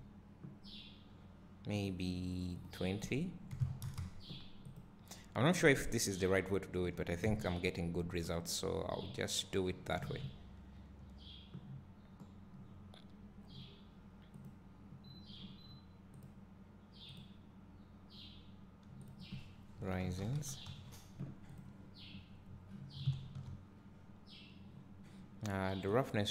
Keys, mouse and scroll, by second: 1.9 click, 4.8 click, 6.4 `, 7.7 KP_0, 9.2-9.5 scroll up 1, 12.3 scroll down 1, 12.7 scroll up 1, 14.5 click, 17.4-22.0 drag, 23.0-24.7 scroll down 1, 24.7-25.4 scroll up 1, 26.2 click.